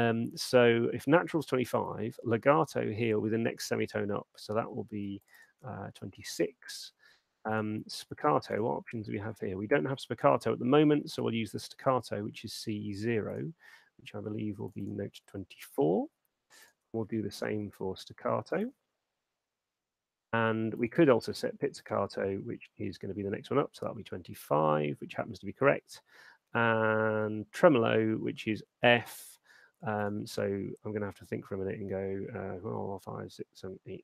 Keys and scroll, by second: 6.1 2, 15.6-16.3 typing, 19.1 4.